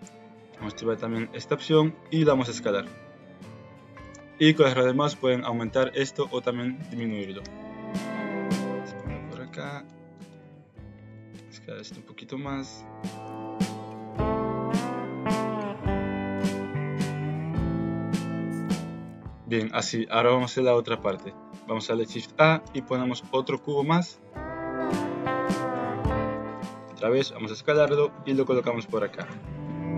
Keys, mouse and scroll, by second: 2.1 s, 7.4 g, 9.4 alt+click, 11.0 alt+click, 11.4 s, 13.8 s, 14.2 r, 15.1 alt+click, 15.7 ctrl+z, 16.0-17.5 typing, 17.1 click, 17.8 Tab, 18.3 alt+z, 18.4 shift+click, 18.8 shift+click, 19.0 middle click, 19.1 Tab, 21.1 Tab, 21.8 shift+a, 25.7 KP_3, 26.3 alt+z, 26.8 s, 28.0 g.